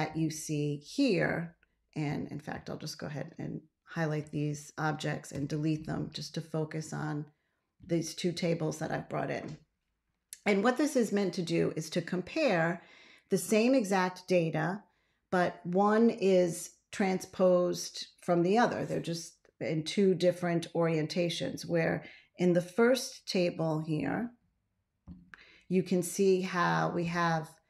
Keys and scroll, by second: 5.2 BackSpace.